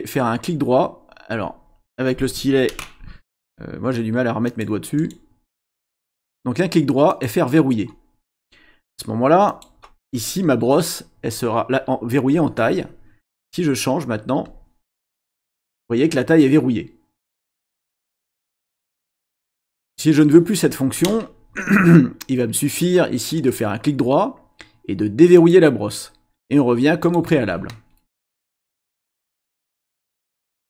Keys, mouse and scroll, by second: 4.4 click, 5.0 right click, 7.1 click, 9.5 click, 12.3 click, 14.4 click, 15.2 click, 19.5 click, 23.4 right click, 25.4 click, 27.0 click, 29.4 click.